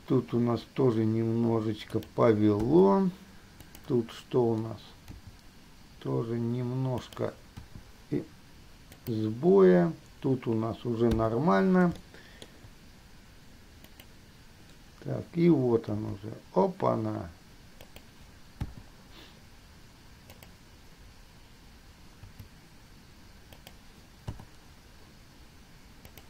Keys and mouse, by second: 2.9 i, 3.9 middle click, 5.3 g, 7.8 i, 9.3 click, 12.1-12.8 shift+middle drag, 14.1 click, 16.3 g, 18.9 i, 22.4 g, 24.5 i.